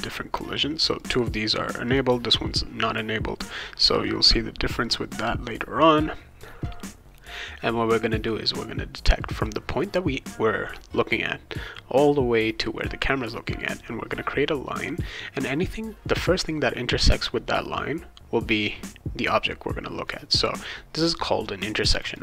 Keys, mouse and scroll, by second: 0.0 click, 1.0 click, 1.9 click, 20.0 click, 21.8 click, 22.1 click.